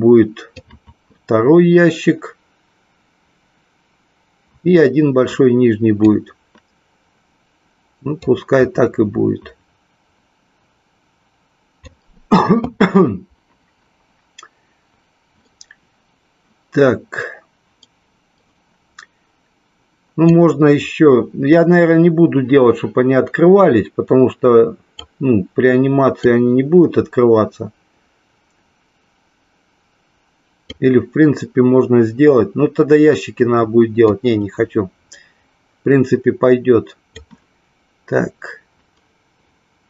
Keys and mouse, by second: 0.6-6.1 drag, 8.2-11.8 drag, 20.3-25.1 drag, 26.2-30.7 drag, 34.1-37.2 drag.